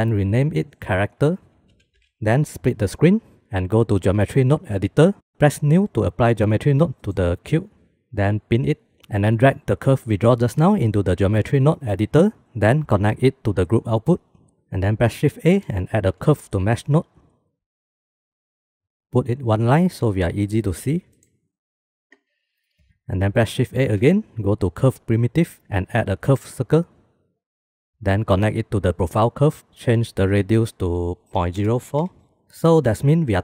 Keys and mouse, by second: 0.7-2.1 drag, 2.3 click, 3.3-4.9 drag, 7.4 ctrl+z, 8.5 click, 9.8-11.9 drag, 12.4 middle click, 13.1 middle click, 13.3-14.5 drag, 15.1 shift+a, 20.2 click, 21.2 click, 22.2 click, 22.5 click, 22.8 click, 23.3 shift+a, 28.2-29.3 drag, 30.7-32.2 drag.